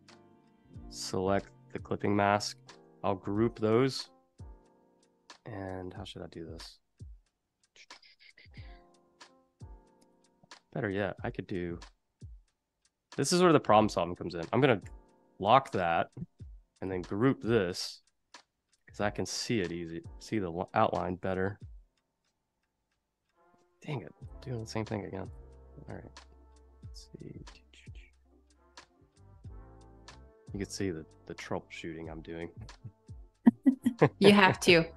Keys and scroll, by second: 3.2 super+g, 10.0 space, 14.8 super+2, 18.0 super+z, 19.5 q, 24.3 a, 25.4 v, 33.9 super+z.